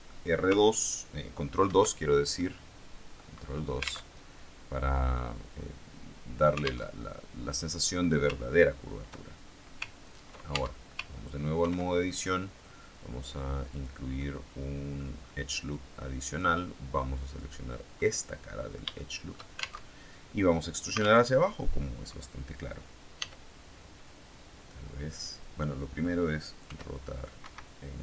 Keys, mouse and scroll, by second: 1.6 ctrl+2, 2.2-3.2 middle drag, 3.2-4.0 scroll up 1, 4.0 alt+Tab, 6.8 alt+Tab, 10.4 ctrl+Tab, 11.5 ctrl+r, 12.0 ctrl+click, 13.6 click, 14.0-15.0 middle drag, 15.2-16.2 scroll up 1, 16.2 click, 17.2 right click, 17.9 middle click, 19.0 shift+middle click, 19.8 alt+shift+Tab, 21.2 alt+Tab, 23.1 e, 25.0 click, 26.6 r, 27.3 Escape.